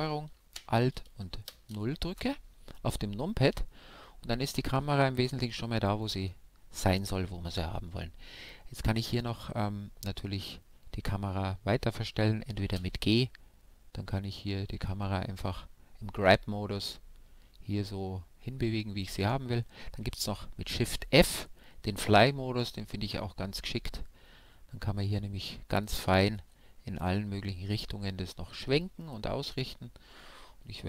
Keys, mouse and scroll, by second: 9.2 g, 15.6-18.1 right drag, 17.2 shift+f, 22.8 shift+f, 25.6-27.8 drag, 27.8 g, 30.7-30.8 drag.